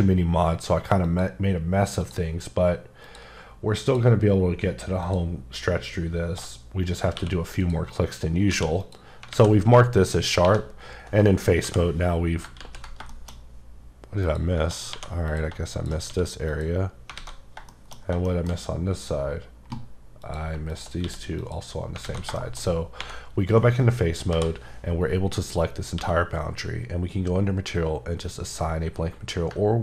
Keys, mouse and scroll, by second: 1.0 click, 2.0 click, 3.0 double click, 3.9 click, 5.0 alt+click, 7.2 q, 7.6 click, 8.5 q, 8.8 click, 9.3 alt+a, 10.4 3, 11.6 l, 12.6 ctrl+z, 13.1 shift+middle click, 13.4 scroll up 3, 14.2 click, 14.9 2, 15.3 click, 15.5 click, 15.7 click, 16.1 q, 16.5 click, 17.0 scroll down 1, 17.2 alt+scroll up 1, 17.3 scroll down 2, 17.6 shift+scroll up 1, 17.7 shift+middle click, 18.5 scroll up 3, 20.2 click, 21.0 q, 21.4 click, 21.8 scroll down 3, 22.0 alt+a, 22.3 shift+middle click, 22.7 scroll up 1, 23.0 3, 24.3 l, 26.0 q, 29.6 q.